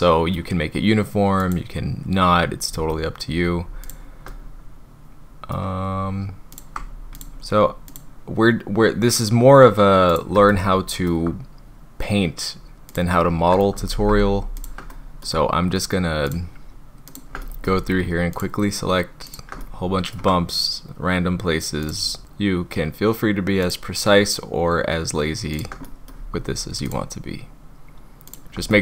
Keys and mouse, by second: 3.9 shift+click, 4.3-5.5 middle drag, 7.9 shift+click, 10.1 shift+click, 10.5 middle click, 14.1 ctrl+z, 14.6 shift+middle click, 14.9 middle click, 16.2 shift+click, 17.1 shift+click, 17.4 middle click, 19.3 shift+click, 19.6 middle click, 21.9 shift+middle click, 25.8 middle click, 28.3 shift+middle click, 28.7 middle click.